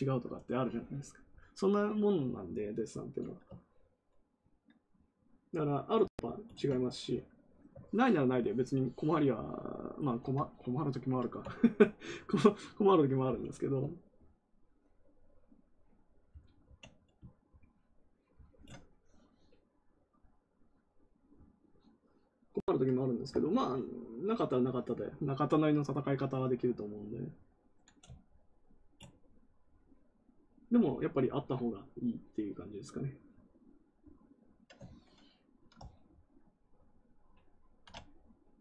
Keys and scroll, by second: 16.6 ctrl+w, 34.8 ctrl+z.